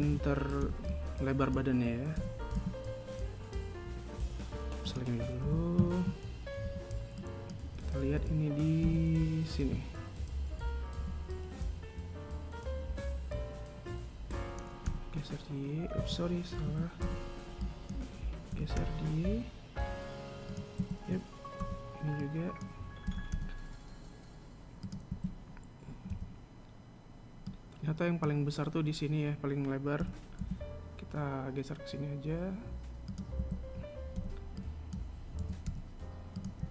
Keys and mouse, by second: 0.5 a, 0.8 a, 1.4 b, 6.2 a, 9.6 KP_3, 11.7 g, 17.4 a, 17.8 b, 21.5 a, 22.4 b, 25.8 a, 30.7 g, 34.1 a, 34.9 b.